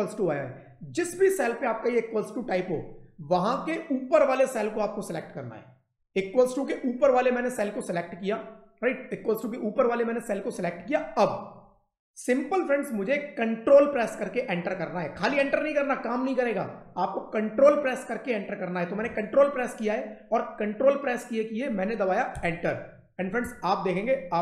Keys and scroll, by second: 22.2 ctrl+Return.